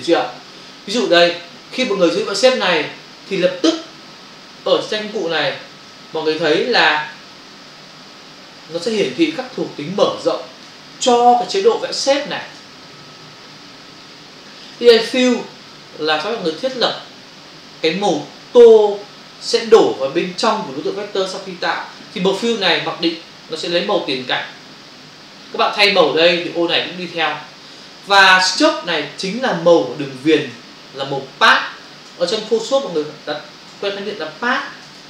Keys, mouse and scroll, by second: 4.6 Print, 6.5 Return, 8.8 v, 9.3 ctrl+click, 10.9 click, 11.8 ctrl+click, 13.3 b, 14.1 shift+click, 15.7 click, 29.5 click, 32.5 click.